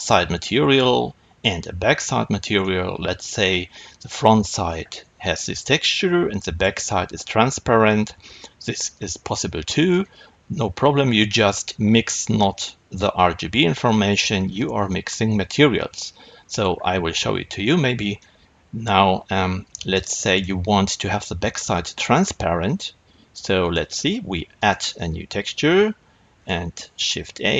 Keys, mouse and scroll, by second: 8.8 click, 18.1-27.5 middle drag.